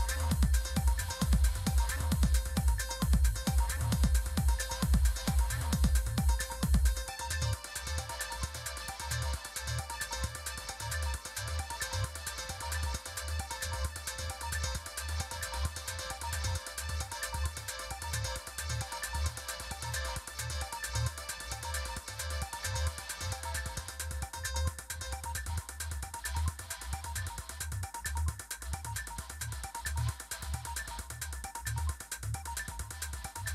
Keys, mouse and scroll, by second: 0.7 Return, 1.7 Return, 5.5-9.3 typing, 10.5 typing, 12.4 click, 20.3 click, 24.0 click, 27.7 click, 31.1 click.